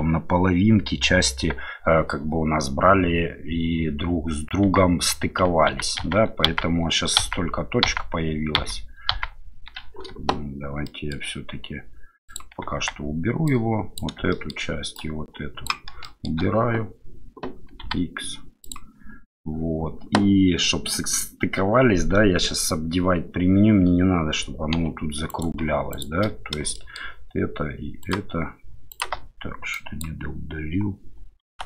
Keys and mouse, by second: 4.7 Tab, 5.8 ctrl+z, 6.1 ctrl+z, 7.3 ctrl+z, 8.0 ctrl+z, 8.6 ctrl+z, 10.9 shift+middle drag, 14.3 shift+middle click, 15.1 shift+click, 16.0 shift+middle click, 24.7 2, 25.3 right click, 25.9 shift+right click, 26.7 shift+middle click, 28.0 shift+click, 28.9 shift+click, 29.7-31.6 drag.